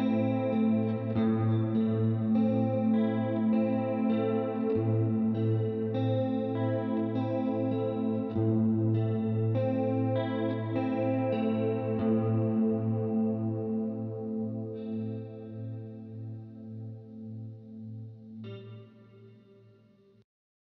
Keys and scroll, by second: 2.3-3.4 typing.